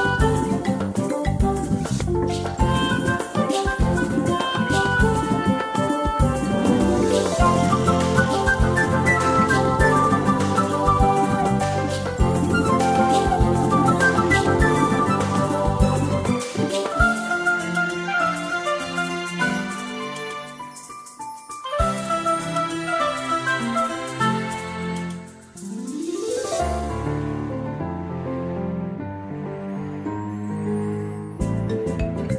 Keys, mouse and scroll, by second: 4.6-4.9 ctrl+scroll down 1, 5.3 ctrl+scroll down 1, 6.3 click, 6.7 space, 18.0 space, 19.8 space, 21.3 click, 25.6 space, 28.0 click.